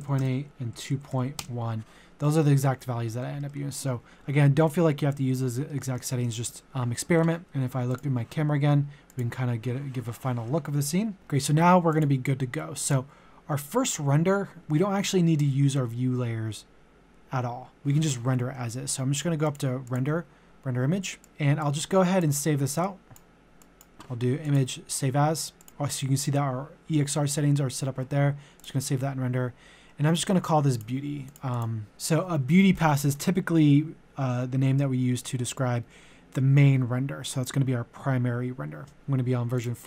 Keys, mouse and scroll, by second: 0.0-1.1 typing, 0.2 Tab, 2.2-5.8 middle drag, 6.1 shift+middle click, 6.6 shift+middle click, 7.9-22.8 drag, 28.6 click, 31.9 typing, 38.7-39.4 typing, 39.5 click.